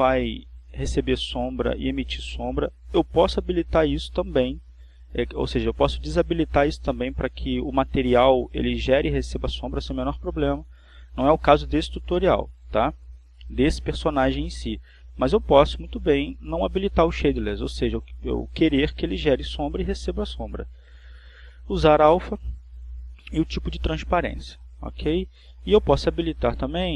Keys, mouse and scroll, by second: 22.2 click, 24.2 click.